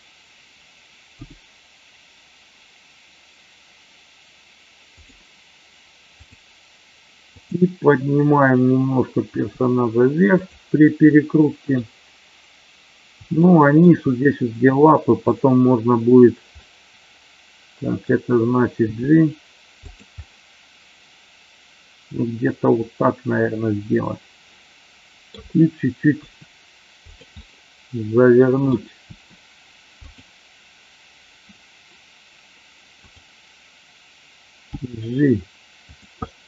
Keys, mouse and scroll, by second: 1.1 g, 5.0 drag, 7.4 click, 9.4 g, 10.4 click, 11.1-11.9 middle drag, 13.4-13.9 shift+middle drag, 16.5-18.0 middle drag, 18.7 g, 19.7 click, 20.2-25.4 middle drag, 26.1 r, 27.0 click, 27.2-28.7 middle drag, 30.0 click, 33.0 click, 34.7 g, 35.8 click, 36.1 scroll up 1, 36.2-36.4 middle drag.